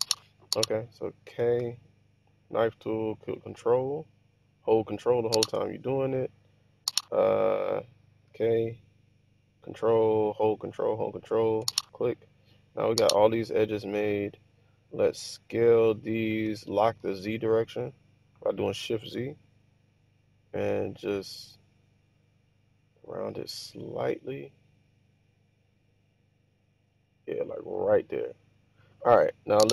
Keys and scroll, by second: 1.7 k, 5.8 Return, 8.3 k, 11.7 Return, 15.9 s, 17.1 shift+z.